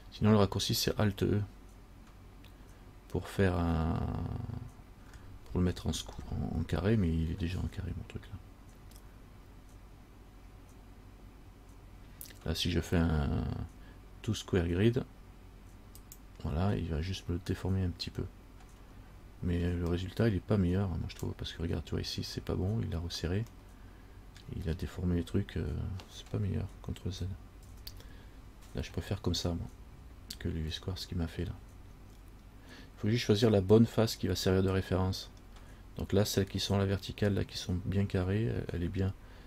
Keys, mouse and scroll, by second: 5.6-10.3 scroll up 10, 16.2 click, 19.6 scroll up 1, 20.2 middle click, 23.8 middle click, 27.9 ctrl+z, 33.8 middle click, 35.6-36.8 scroll down 2.